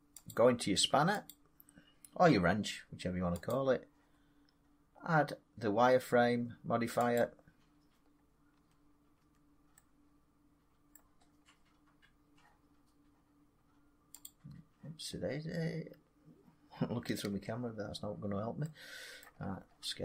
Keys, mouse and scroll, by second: 1.2 click, 3.4 click, 7.1 click, 8.0 middle click, 8.5 Tab, 8.5 scroll up 1, 9.1 Tab, 10.8 scroll down 1, 11.1 scroll up 1, 11.1 scroll down 3, 11.3 scroll, 11.9 scroll up 1, 14.2 click, 15.0 scroll down 3, 15.3 middle click, 15.5 middle click, 16.0 scroll down 3, 16.6 scroll, 17.2 space, 19.1 middle click, 19.3 scroll, 19.5 scroll down 4, 19.6 scroll down 4.